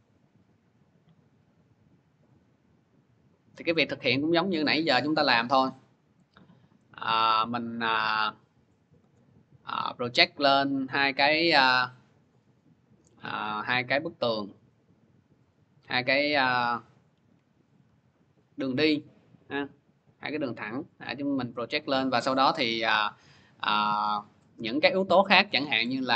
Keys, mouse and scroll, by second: 6.7-8.4 scroll, 8.9 click, 13.3 click, 15.4 click, 18.3 click, 21.3 click, 24.0 click, 24.7 click.